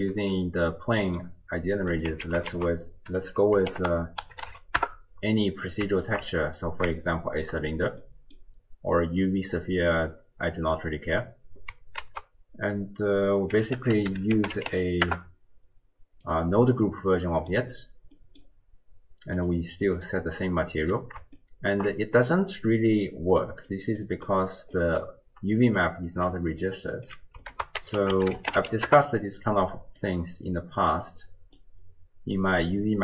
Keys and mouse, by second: 0.6-1.3 drag, 1.9 click, 2.2 x, 2.5 ctrl+a, 5.9 alt+shift+click, 7.0-7.5 shift+drag, 8.0 click, 12.1 ctrl+a, 17.2 click, 18.3 click, 19.4 click, 21.5-21.8 shift+drag, 23.3 click, 24.1 click, 24.8 click, 25.6-26.6 d, 25.8 click, 26.6 click, 27.1 d, 27.6 ctrl+a, 31.1 click, 32.9 click.